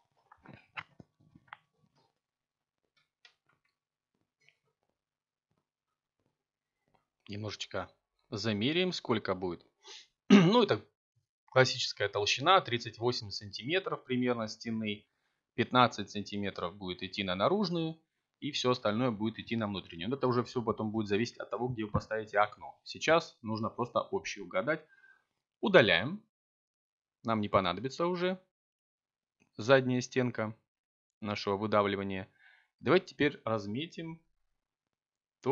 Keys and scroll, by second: 2.2 7, 13.8 a, 21.7 x, 33.7 k.